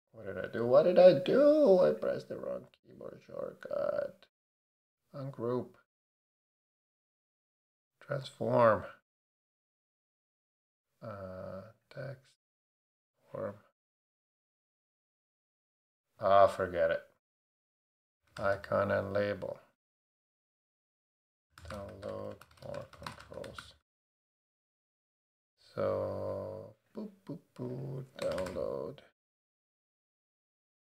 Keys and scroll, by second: 17.5 BackSpace, 17.8 /, 18.3 c, 19.7 Down, 20.1 Return, 21.2-23.9 typing, 28.0-28.9 typing, 30.5 l.